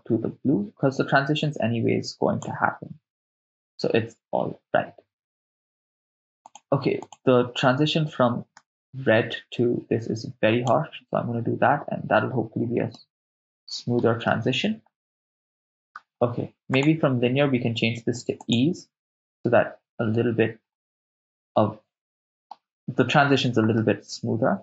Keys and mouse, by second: 6.5 click, 7.1 click, 13.0-14.1 middle drag, 14.3-16.0 ctrl+middle drag, 16.8-18.6 drag, 21.3-22.5 middle drag, 23.8-24.6 middle drag.